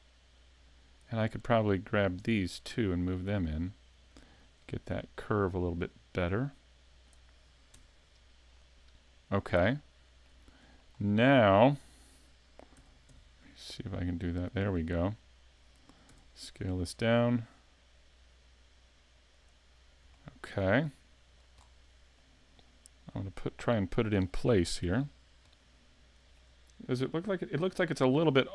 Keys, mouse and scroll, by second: 0.7 shift+right click, 2.1 right click, 3.1 shift+right click, 4.1 click, 7.4 scroll down 1, 7.7 Tab, 8.6 click, 9.8 shift+middle click, 10.4 scroll up 3, 10.8 shift+middle click, 11.5-11.8 scroll down 2, 12.8 s, 15.5 click, 16.1 s, 19.7 scroll up 3, 20.1 shift+middle click, 20.8 middle click, 21.4 scroll up 1, 21.6 scroll down 6, 22.2 middle click, 23.6 click, 24.8 KP_5, 25.1 scroll down 2, 25.5 middle click, 26.9-27.4 scroll up 2, 27.4-28.0 scroll down 2.